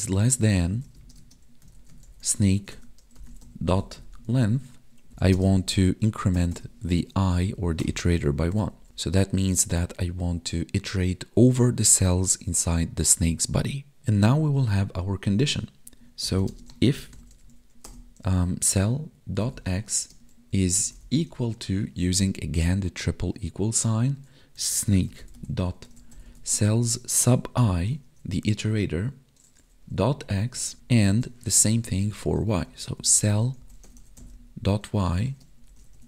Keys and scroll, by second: 0.0 space, 0.6 BackSpace, 0.9 space, 5.0 Tab, 5.3 space, 7.2 ctrl+s, 7.4 Right, 8.1 ctrl+s, 8.3 Right, 16.5 space, 20.0 space, 21.3 space, 28.1 Right, 30.5 space, 31.4 space, 35.2 space.